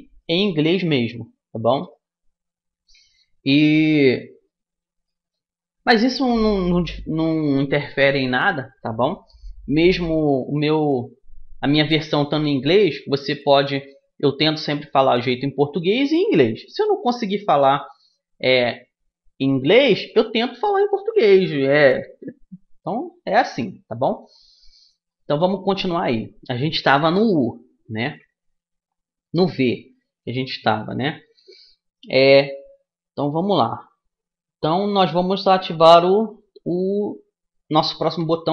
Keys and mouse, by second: 0.3-2.2 middle drag, 2.2-3.2 right drag, 3.4 right click, 4.1-9.0 middle drag, 9.8-13.0 middle drag, 13.9-15.4 middle drag, 15.4-16.4 right drag, 16.4-18.1 middle drag, 24.8-26.8 middle drag.